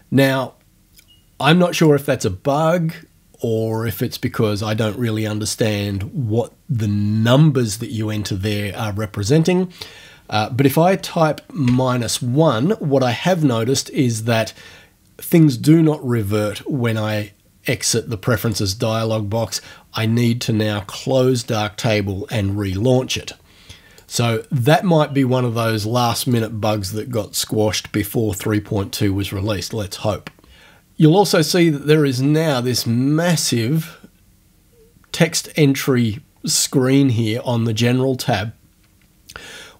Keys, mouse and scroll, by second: 1.4 click, 11.0 -, 11.6 1, 18.4 click, 24.0 click, 26.2 click.